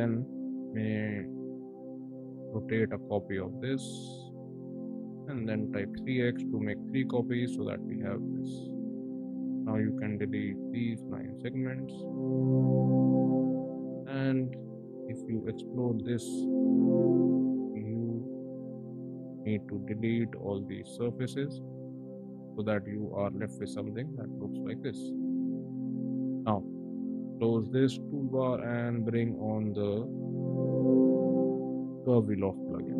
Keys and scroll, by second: 4.8-6.5 typing, 5.7 Return, 8.3 space, 9.5 e, 11.5 space, 15.4 shift+x, 17.6 d, 28.5 ctrl+`.